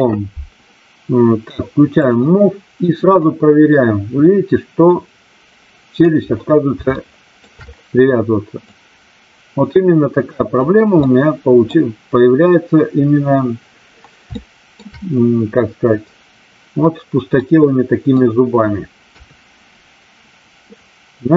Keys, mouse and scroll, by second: 2.0 click, 3.2-6.0 drag, 7.0 shift+middle click, 8.7-10.4 drag, 11.0-11.7 middle drag, 14.3-14.7 shift+middle drag, 17.3-18.1 middle drag, 19.1 KP_3.